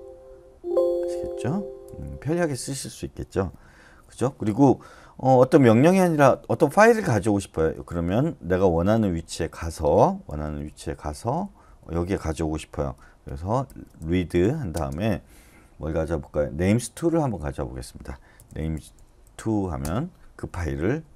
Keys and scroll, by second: 0.0-1.5 typing, 10.3-11.7 typing, 13.7-14.7 typing, 18.1-19.2 typing, 19.8 Return.